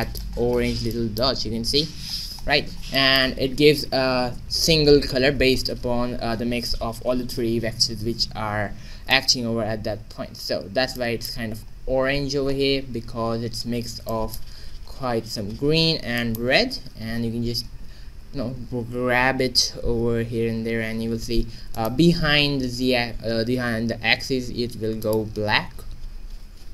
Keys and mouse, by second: 0.0-2.4 middle drag, 2.6-4.3 middle drag, 8.7 middle click, 10.1 shift+z, 11.4 q, 13.8 shift+z, 14.5 q, 16.6 shift+z, 17.7 g, 22.2 shift+z, 24.5 g, 25.6 shift+z.